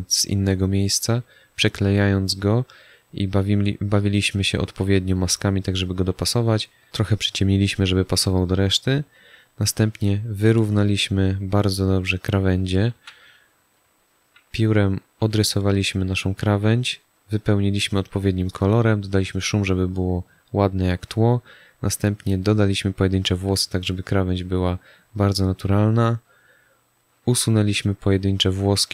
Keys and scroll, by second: 12.9 z, 13.8 space.